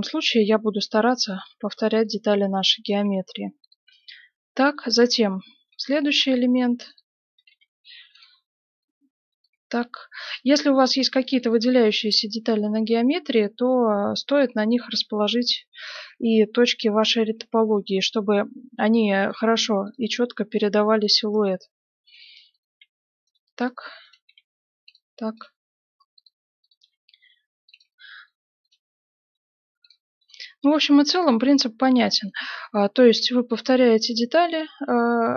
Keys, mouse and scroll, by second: 0.4 g, 1.3-4.5 right drag, 1.6 g, 2.1-7.7 middle drag, 3.0 g, 5.6-9.0 right drag, 6.8 g, 7.5 g, 8.6-10.2 middle drag, 9.3 right click, 9.5 g, 10.5-16.0 middle drag, 14.9 g, 15.8 right click, 16.0 g, 17.2-21.8 middle drag, 19.2 right click, 19.8 g, 21.3-28.3 right drag, 21.4 g, 22.7 g, 24.2 g, 25.5 g, 26.8 g, 27.9-29.6 middle drag, 28.6-32.7 right drag, 29.3 g, 30.3 g, 31.3 g, 32.2-33.9 middle drag, 33.0-35.3 right drag, 33.1 g, 34.8 g.